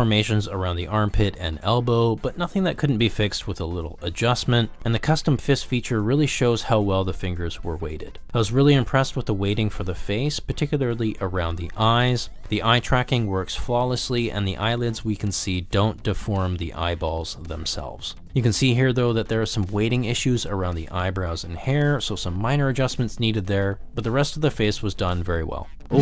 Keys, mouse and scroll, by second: 0.1 middle click, 0.3 r, 0.7 g, 1.0 middle click, 1.3 middle click, 1.5 shift+middle click, 1.9 middle click, 2.1-4.2 typing, 2.3 click, 2.4 middle click, 3.0 drag, 3.1 middle click, 4.0 middle click, 4.8 middle click, 5.3 s, 6.4 click, 6.5 middle click, 7.4 click, 7.6 middle drag, 8.0 ctrl+middle click, 9.0 click, 9.8 g, 13.2 click, 13.6 ctrl+z, 14.8 g, 16.8 ctrl+z, 17.3 g, 18.1 click, 19.0-19.4 drag, 19.6-20.0 shift+drag, 20.2 g, 21.9 ctrl+z, 21.9 drag, 22.3 g, 23.0 click, 23.2 ctrl+z, 23.9 g, 24.0 click, 24.3 g, 24.7 g, 25.0 click, 25.5 ctrl+middle click, 25.7 ctrl+middle click.